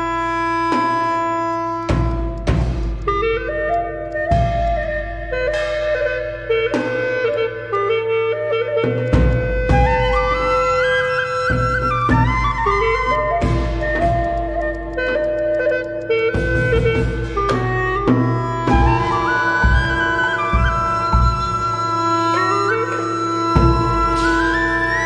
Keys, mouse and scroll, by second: 3.2 scroll down 1, 3.4 scroll up 1, 3.7 alt+click, 3.9 alt+middle click, 6.1-6.6 scroll up 1, 6.6 Tab, 6.7 middle click, 6.7 Tab, 8.0-8.4 scroll down 1, 8.4 Tab, 9.0 alt+middle click, 9.0 alt+click, 10.4 ctrl+s, 10.6 scroll down 1, 11.2 alt+click, 11.7 alt+click, 12.6 alt+click, 12.6 scroll up 1, 12.8 alt+middle click, 14.6 alt+click, 15.2 alt+click, 16.0 alt+click, 17.2 middle click, 17.8 Tab, 17.8 middle click, 17.9 Tab, 18.3 Tab, 18.4 middle click, 18.4 Tab, 18.9 scroll down 1, 19.0 alt+click, 19.5 alt+click, 19.8 ctrl+z, 19.9 ctrl+z, 20.5 alt+click, 20.7 scroll up 1, 20.9 alt+middle click, 21.2 Tab, 21.7 Tab, 22.0 Tab, 22.3 Tab, 22.6 Tab, 23.3 scroll down 1, 23.5 alt+click, 23.9 alt+click, 24.8 Tab.